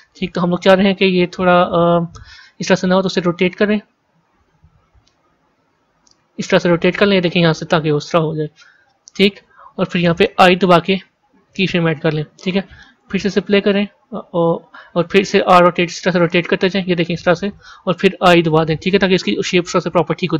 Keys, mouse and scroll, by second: 1.3-3.0 drag, 3.0 r, 12.8-15.7 drag, 15.7 r.